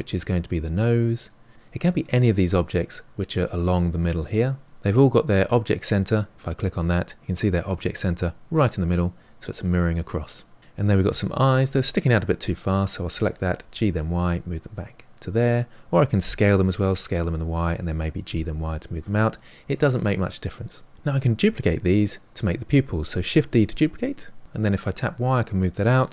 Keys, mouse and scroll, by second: 6.3 click, 10.2 drag, 10.4-13.1 middle drag, 13.1 g, 16.1 s, 18.0 g, 23.5 shift+d.